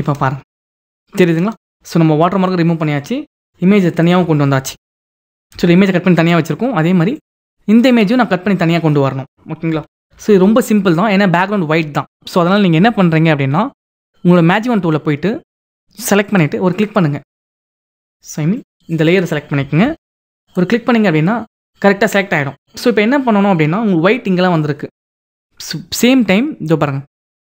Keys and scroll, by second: 4.6 ctrl+e, 7.6 ctrl+e, 9.6 ctrl+-, 19.4 ctrl+d.